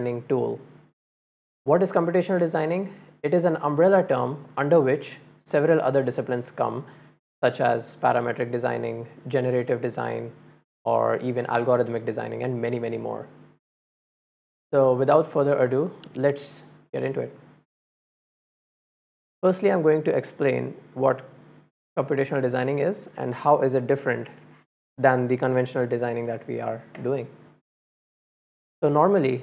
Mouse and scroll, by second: 21.6 click.